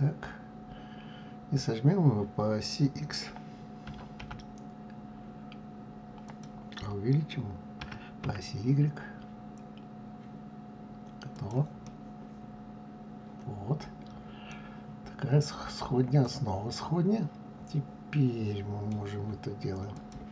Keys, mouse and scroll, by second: 3.9 s, 7.8 s, 11.8-14.8 middle drag, 14.8 scroll down 3, 15.4-16.2 scroll up 3, 16.2-19.2 middle drag, 19.9 click.